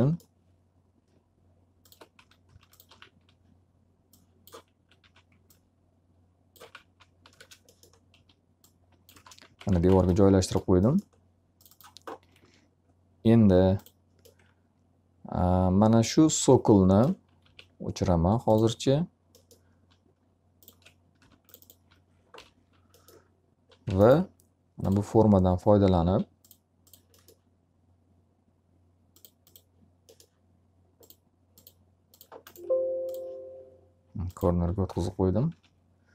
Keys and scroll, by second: 2.2-3.3 typing, 4.9 w, 6.3-9.6 typing, 9.9 alt+a, 12.3 q, 17.0 alt+r, 21.1 d, 22.2 l, 26.0 s, 35.0 1.